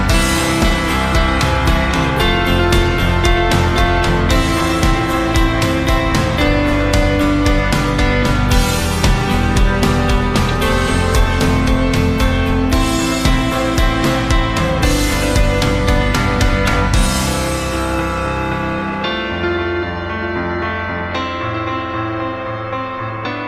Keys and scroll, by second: 17.5 g, 21.8 d.